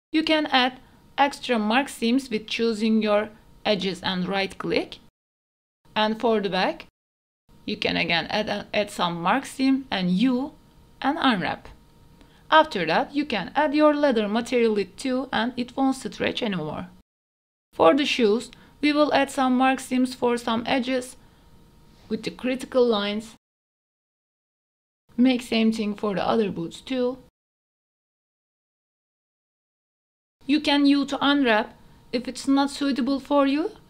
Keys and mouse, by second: 0.1 middle click, 0.6-1.9 shift+middle drag, 1.9 middle click, 2.5 Tab, 2.8 middle click, 3.1 middle click, 3.5 2, 4.6 middle click, 5.1 middle click, 5.6 middle click, 5.7 shift+middle click, 6.5 Tab, 6.6 middle click, 6.8 KP_Divide, 6.9 middle click, 7.0 Tab, 7.2 shift+middle click, 7.5 alt+click, 8.0 middle click, 8.1 Tab, 8.3 alt+click, 8.9 middle click, 9.3 alt+click, 9.5 middle click, 10.1 a, 10.5 u, 13.5 Tab, 14.1 right click, 14.5 right click, 16.2 right click, 16.5 middle click, 17.2 KP_Divide, 17.7 right click, 18.2 middle click, 18.7 Tab, 18.7 KP_Divide, 19.2 middle click, 19.3 Tab, 19.5 shift+middle click, 19.7 shift+middle click, 19.9 alt+right click, 20.3 middle click, 20.5 middle click, 20.7 shift+middle click, 20.9 middle click, 21.2 alt+click, 21.6 middle click, 22.0 ctrl+z, 22.0 middle click, 22.8 click, 23.1 middle click, 23.5 click, 23.7 middle click, 24.1 middle click, 24.4 shift+middle click, 24.7 shift+middle click, 25.0 alt+click, 25.2 right click, 25.8 alt+click, 26.0 middle click, 26.3 right click, 26.6 middle click, 26.9 shift+middle click, 27.1 middle click, 27.4 middle click, 27.7 middle click, 28.0 shift+middle click, 28.4 shift+middle click, 28.9 alt+shift+middle click, 29.1 middle click, 29.4 shift+middle click, 29.8 middle click, 30.2 shift+middle click, 30.8 alt+shift+click, 31.2 middle click, 31.5 a, 31.6 shift+middle click, 32.1 middle click, 32.6 u, 33.0 Tab, 33.1 ctrl+a, 33.6 Tab, 33.7 a.